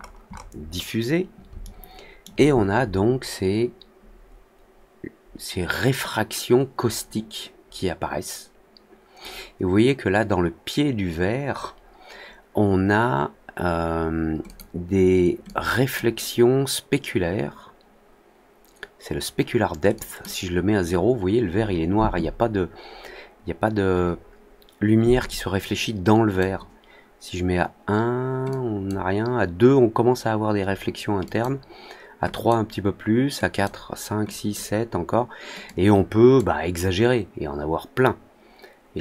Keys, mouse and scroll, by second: 0.4 middle click, 1.5 alt+middle click, 14.4 click, 15.4-15.9 drag, 19.9 drag, 25.2 click, 28.4 click, 31.2 click, 32.2 click, 33.4 click, 34.2 drag, 35.6-36.3 drag.